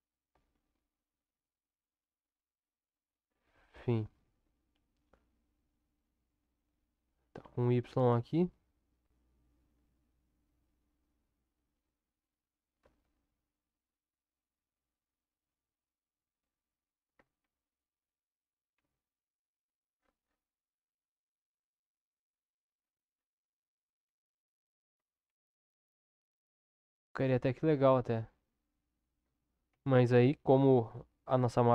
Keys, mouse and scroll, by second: 0.3 g, 4.7 r, 12.8 s, 17.4 ctrl+KP_7, 18.7 Tab, 21.0-22.0 middle drag, 24.0 KP_7, 25.2 ctrl+KP_7, 28.2 Tab, 29.7 ctrl+z, 30.2 ctrl+z, 30.5 ctrl+z, 31.5 ctrl+z.